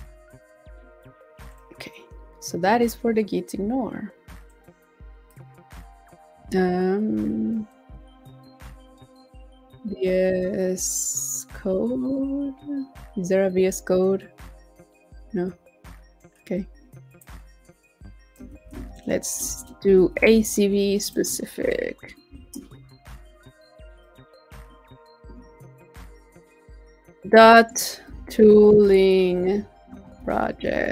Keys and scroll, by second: 18.5 super+c, 20.1 super+v.